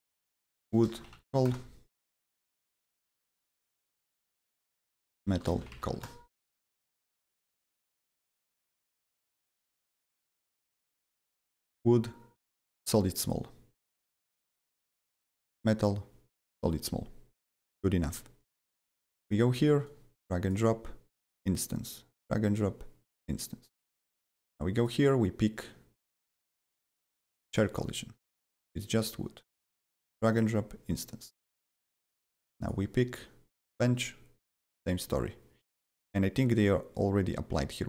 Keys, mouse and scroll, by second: 0.0-1.7 typing, 2.6 click, 3.4 click, 3.8 click, 4.1 ctrl+a, 4.6-6.3 typing, 6.7 Return, 7.5 click, 8.3 click, 9.0 click, 9.5 click, 10.3 click, 11.7 click, 13.2 click, 14.1 click, 15.5 click, 18.5 click, 19.8-21.8 drag, 21.8-24.1 drag, 24.1 click, 24.8-27.5 drag, 27.5 click, 28.7-32.6 drag, 32.6-33.7 drag, 33.7-37.7 drag, 37.7-37.8 drag.